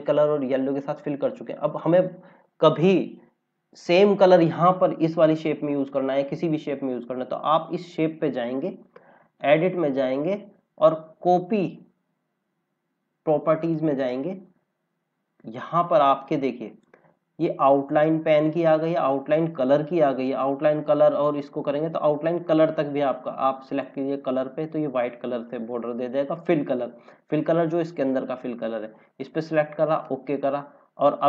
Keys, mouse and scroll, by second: 0.9 scroll down 1, 4.4 click, 9.3 click, 13.9 click, 15.9 click, 23.6 click, 29.1 click.